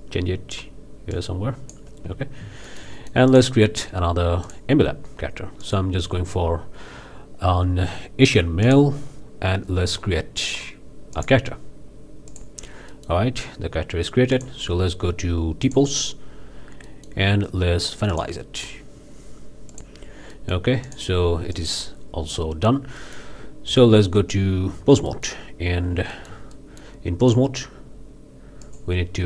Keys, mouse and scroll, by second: 1.1 click, 2.6-3.6 shift+middle drag, 4.4 drag, 5.6 click, 8.6 click, 11.1 click, 12.3 click, 12.9 click, 14.3-14.6 drag, 15.7 click, 16.9 middle click, 18.1 click, 19.7 click, 20.4-20.7 middle drag, 20.9 drag, 21.5-21.9 drag, 23.0-23.4 drag, 23.7 Tab, 25.1-25.5 drag, 25.8 scroll up 2, 26.1-27.0 shift+drag, 27.2-27.5 drag, 28.6-29.0 drag.